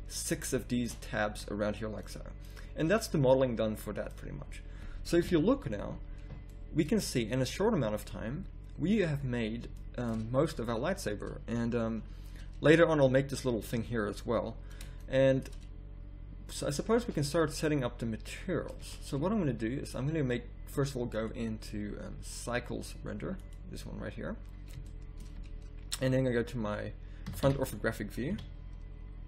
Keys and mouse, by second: 5.2 KP_1, 5.8 z, 9.8 middle click, 11.4 middle click, 13.7 middle click, 15.0 middle click, 18.8 z, 27.3 KP_5, 27.4 KP_1, 28.3 KP_5.